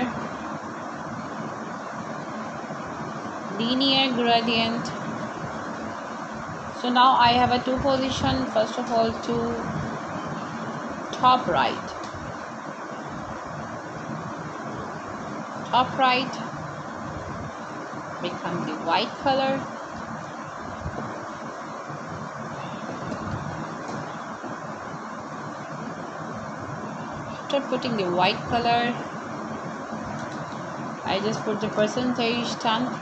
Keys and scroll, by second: 5.0 shift+3, 5.5 f, 7.5 4, 8.3 BackSpace, 9.6 f, 14.6 space, 15.1 1, 15.8 0, 16.6 shift+5, 19.1 ,, 23.3 shift+3, 23.9 0, 26.1 space, 26.5 1, 27.0 0, 28.2 shift+5, 30.6 Right, 31.9 Return.